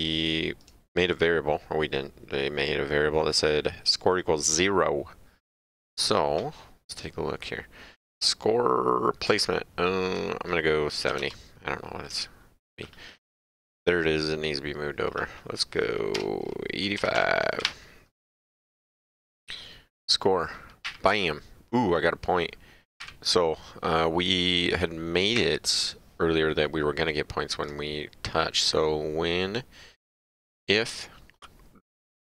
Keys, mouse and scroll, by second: 0.6 click, 3.3 click, 5.5 click, 9.3 click, 11.1 KP_7, 11.2 KP_0, 12.8 click, 15.1 click, 16.1 BackSpace, 17.0 KP_8, 17.1 KP_5, 17.6 Delete, 18.7 click, 20.8 Up, 23.0 Up, 25.3 Up, 27.6 click.